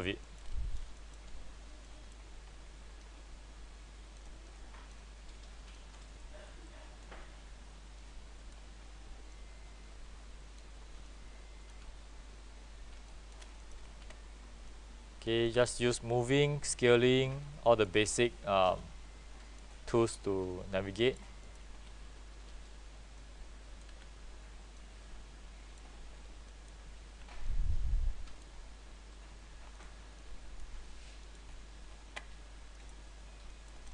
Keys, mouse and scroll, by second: 0.3 alt+middle click, 0.6-0.9 scroll up 1, 1.1 alt+middle click, 2.0-12.4 drag, 13.7 middle click, 14.0 r, 14.8-19.8 drag, 15.7 w, 20.1 alt+middle click, 21.1 click, 21.5 middle click, 21.8 r, 23.3-31.3 drag, 24.0 w, 27.2 w, 32.9 middle click.